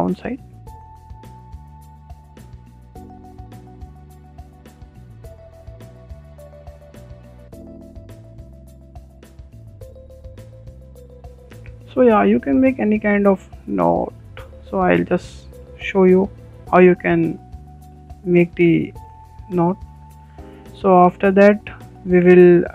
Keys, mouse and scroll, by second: 0.6 click, 0.9 click, 1.3 click, 1.6 shift+middle click, 2.0 click, 2.0 middle click, 2.2 click, 2.5 shift+middle click, 2.6 click, 2.7 click, 3.3-4.9 typing, 4.3 shift+middle click, 5.2 middle click, 5.4 click, 5.5 click, 5.8 middle click, 5.9 click, 6.0 middle click, 6.1 click, 6.4 click, 6.5 click, 6.8 click, 6.9 middle click, 7.2 click, 7.7 middle click, 7.9 click, 8.1 click, 8.4 click, 8.8 click, 9.0 click, 9.3 e, 9.6 click, 9.7 click, 9.9 middle click, 10.1 e, 10.5 click, 10.6 click, 11.2 scroll down 2, 11.2-12.9 middle drag, 12.9 scroll down 2, 13.0-13.9 middle drag, 13.9 scroll up 2, 14.2-14.8 shift+middle drag, 14.8 Tab, 15.3-17.2 middle drag, 17.2 scroll up 1, 17.4-19.3 shift+middle drag, 19.3 scroll up 1, 19.4-22.7 shift+middle drag.